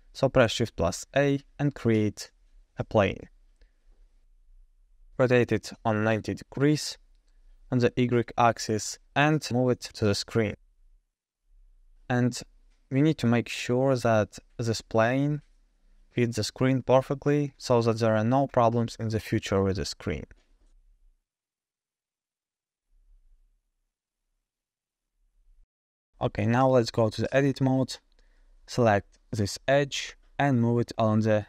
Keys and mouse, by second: 0.6 shift+a, 4.9 r, 10.1 g, 14.0-14.4 shift+middle drag, 14.4 shift+drag, 14.6-15.1 shift+middle drag, 16.0-16.5 shift+middle drag, 17.1 shift+drag, 17.8 g, 22.7 g, 25.7 shift+drag, 25.9 shift+middle drag, 26.2 middle drag, 26.6-27.0 shift+middle drag, 27.7 Tab, 28.7 2, 29.3 click, 30.1 g.